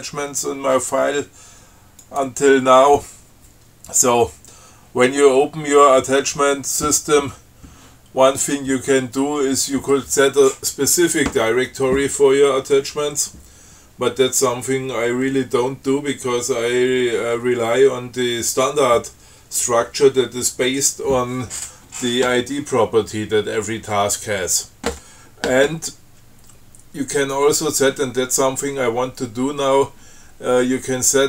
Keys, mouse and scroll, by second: 2.3 click.